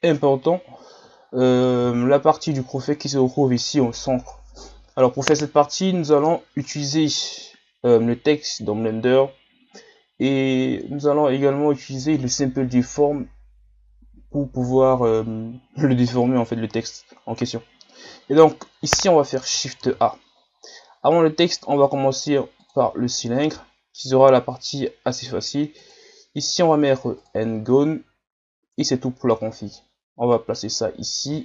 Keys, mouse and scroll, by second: 0.6-1.2 scroll down 4, 1.2-1.9 shift+scroll up 5, 1.9-2.4 shift+scroll up 7, 6.2 scroll down 4, 19.8 shift+a, 25.8-28.8 drag, 29.2 Tab, 29.7-30.7 drag, 30.7-31.2 scroll up 3, 31.2 s.